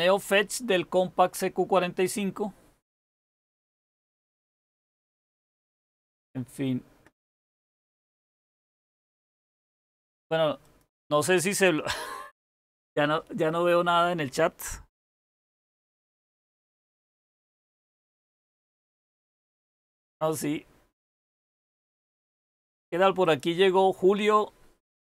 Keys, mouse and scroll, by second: 15.0-16.7 typing, 18.4 Return.